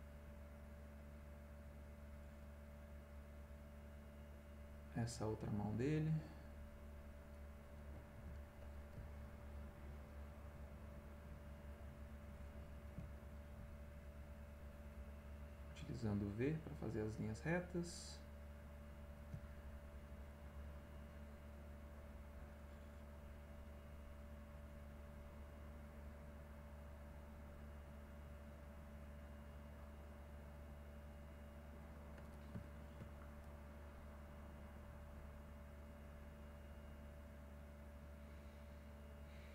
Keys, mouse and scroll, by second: 2.6 click, 4.1 click, 5.0 click, 5.8 click, 8.9 v, 9.7-11.1 drag, 11.5-12.8 drag, 13.1 middle click, 13.6 v, 14.5-16.0 drag, 16.3 click, 17.8-19.4 drag, 19.5 middle click, 20.1 middle click, 24.0 click, 25.7-27.7 drag, 29.6-31.4 drag, 31.7 click, 32.3 ctrl+middle click, 33.1 ctrl+middle click, 34.8-37.0 drag, 37.9-39.4 drag.